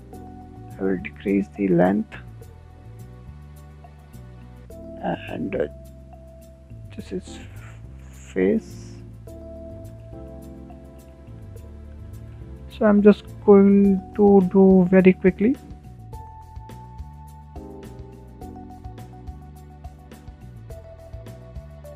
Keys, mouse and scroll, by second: 8.0-8.4 drag, 8.4 scroll up 3, 8.6 shift+middle click, 8.9 scroll down 1, 9.0-10.0 middle drag, 10.0 scroll up 1, 10.0-10.6 middle drag, 10.6 scroll up 1, 10.9-12.6 shift+middle drag, 12.6 scroll down 4, 13.0-16.5 shift+middle drag, 16.5 click, 17.7 click, 19.1 click, 20.3 click, 20.5 scroll up 6, 20.6 shift+middle click, 20.7 shift+middle click, 20.7-21.6 scroll down 5, 21.6 click, 21.6 shift+middle click, 21.7 scroll up 6, 21.7 middle click.